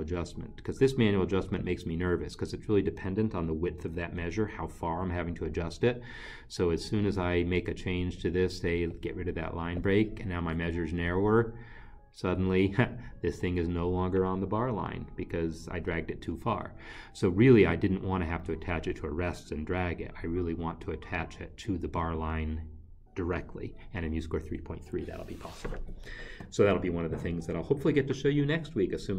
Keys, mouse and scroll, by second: 1.5 click, 9.8 click, 10.4 Delete.